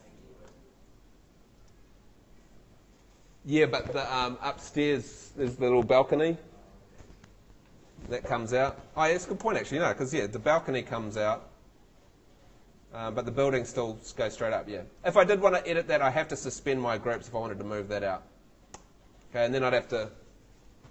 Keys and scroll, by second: 0.3 Escape, 1.0 Tab, 9.4 Escape, 10.3 F3, 13.3 Home, 18.8 Escape.